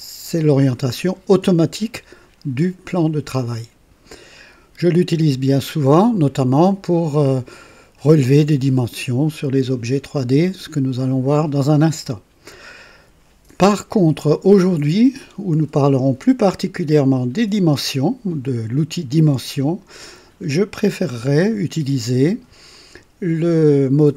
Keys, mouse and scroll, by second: 6.2 click, 12.4 click, 14.2-15.1 drag, 22.7 click.